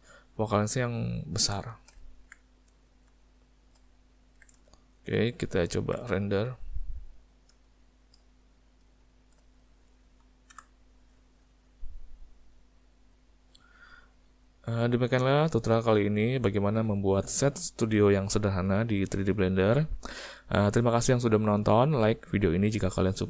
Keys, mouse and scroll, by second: 1.7 shift+middle click, 2.1 ctrl+middle click, 2.5 middle click, 3.1 shift+middle click, 4.1 ctrl+middle click, 4.7 shift+middle click, 5.7 ctrl+middle click, 6.2 shift+middle click, 7.7 ctrl+middle click.